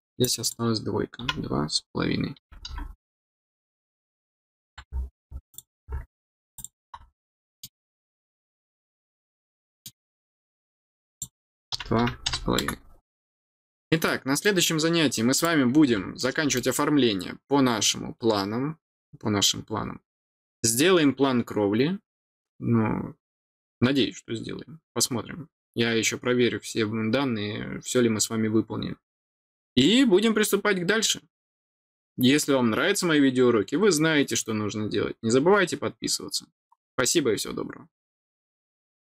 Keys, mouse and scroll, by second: 0.2 click, 3.9-4.2 scroll down 2, 5.5 click, 6.5 click, 7.3 middle click, 8.5-9.8 middle drag, 10.9 click, 13.3 scroll down 1, 14.0 middle click, 15.3 click, 16.1 middle click.